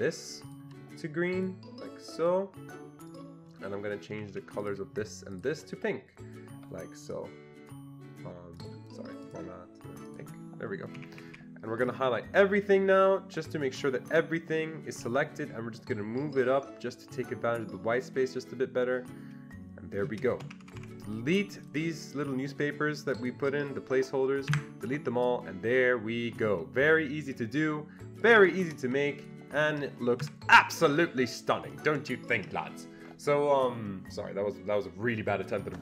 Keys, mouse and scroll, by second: 0.5 ctrl+double click, 2.2 ctrl+double click, 3.1 click, 4.1 Escape, 4.3 Escape, 4.6 click, 5.4 ctrl+click, 7.0 ctrl+click, 8.6 ctrl+click, 10.1 click, 11.0 Escape, 11.2 Escape, 11.3 Escape, 11.9-15.8 drag, 15.9-20.8 shift+drag, 20.5 Escape, 20.6 Escape, 20.8 Escape, 21.7 click, 23.1 ctrl+click, 24.5 Delete, 25.2 ctrl+click, 26.4-26.9 ctrl+scroll up 1, 26.9-27.3 ctrl+scroll down 1, 28.2 click, 28.4 Escape, 29.6 ctrl+double click, 30.2 Delete, 31.2-31.6 ctrl+scroll up 1.